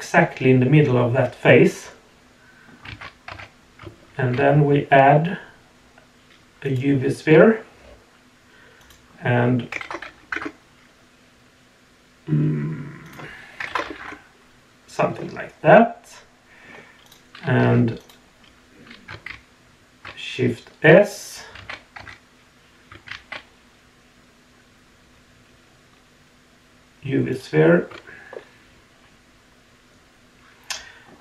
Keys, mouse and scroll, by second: 1.0-2.7 middle drag, 2.9 alt+a, 3.3 Tab, 4.1 shift+a, 8.8-10.3 drag, 13.0 click, 15.1-15.5 middle drag, 16.0-16.6 middle drag, 17.0 click, 17.6 Tab, 18.0 click, 19.3 shift+s, 21.6 alt+a, 22.0 Tab, 23.1 shift+a, 28.3-31.1 middle drag.